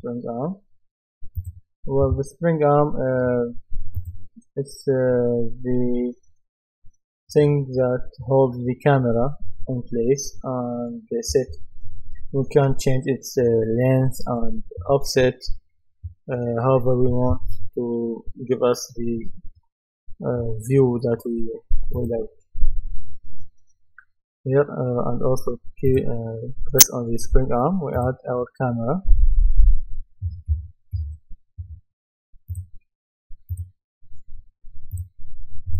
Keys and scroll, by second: 0.0-0.4 typing, 30.0-31.5 typing.